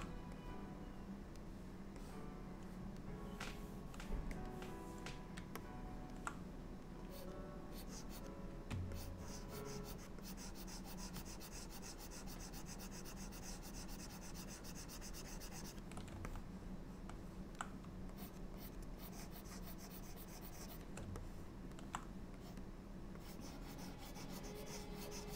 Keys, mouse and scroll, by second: 0.5 click, 2.1 click, 4.5 click, 5.7 middle click, 7.2 click, 7.8 click, 9.0 ctrl+click, 10.3 ctrl+click, 16.4 middle click, 18.2 shift+click, 18.6 shift+click, 19.2 shift+click, 21.3 middle click, 22.5 middle click, 22.5 click, 23.3 click.